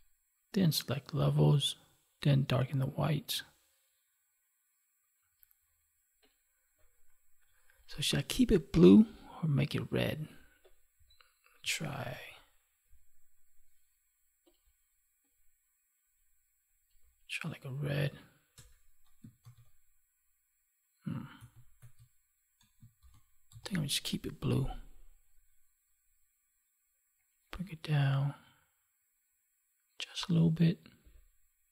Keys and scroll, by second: 18.5 alt+BackSpace, 19.3 ctrl+d, 21.2 ctrl+z.